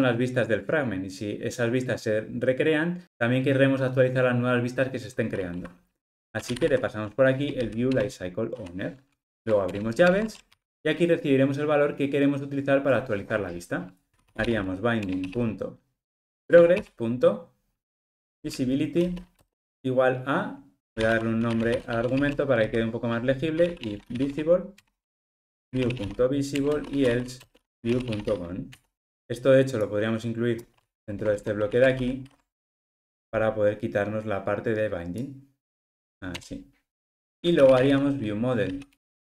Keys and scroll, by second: 8.0 Return, 10.0 alt+super+l, 15.0 Return, 24.8 Return, 38.9 Return.